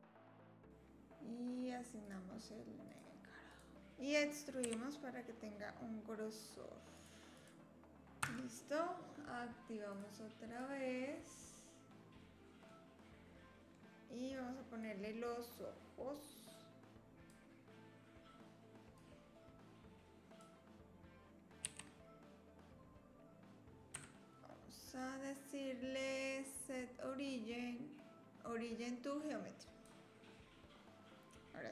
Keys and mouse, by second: 0.3-3.0 drag, 3.7 a, 4.6 e, 7.3 click, 8.2 Tab, 9.9 click, 10.5 click, 12.7-13.7 middle drag, 14.8 click, 16.5 click, 19.0-20.5 drag, 21.6 r, 24.9-29.8 drag.